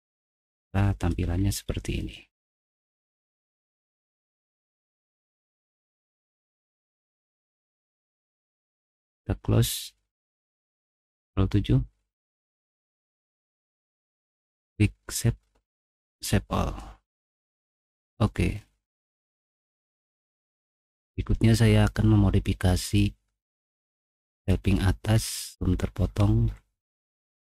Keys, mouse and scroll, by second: 0.1 middle click, 1.3 scroll down 1, 1.5 middle click, 1.9 scroll down 1, 2.1-5.5 middle drag, 5.5 scroll up 1, 5.7 scroll down 1, 5.9 scroll up 1, 5.9 scroll down 1, 5.9 scroll up 1, 6.0 scroll down 1, 6.2 middle click, 6.7 click, 7.3 middle click, 7.7 middle click, 8.7 click, 9.0 click, 11.2 ctrl+7, 11.8 ctrl+7, 14.2 click, 16.1 click, 17.6 click, 20.5 click, 23.9 middle click, 23.9-25.2 scroll down 6, 24.4 middle click, 25.1 middle click, 26.0 middle click, 26.6 middle click, 26.9 middle click.